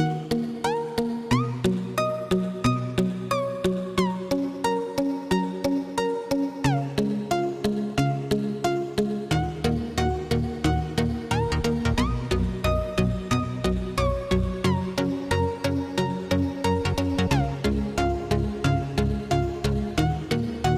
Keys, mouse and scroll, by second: 3.1-10.3 drag, 10.3-20.7 shift+drag.